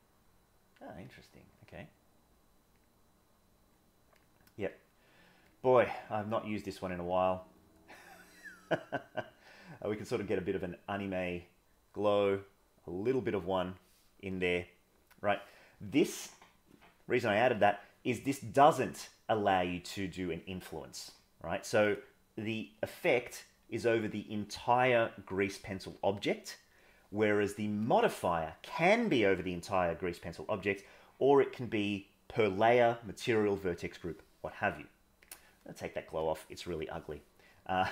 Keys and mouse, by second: 1.1 click, 4.7 click, 5.8-6.6 drag, 10.9-13.8 drag, 14.8 middle click.